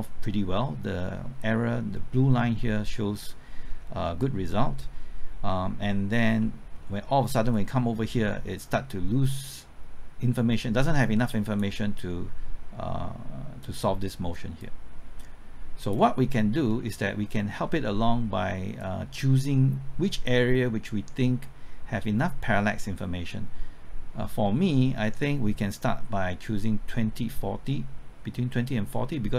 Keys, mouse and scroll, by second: 3.7-6.4 scroll up 1, 6.4 middle click, 7.5-16.3 drag, 16.3-16.8 scroll down 1, 16.8-17.2 scroll up 1, 17.2 middle click, 17.6-18.0 scroll up 1, 18.0 middle click, 18.8-29.3 drag.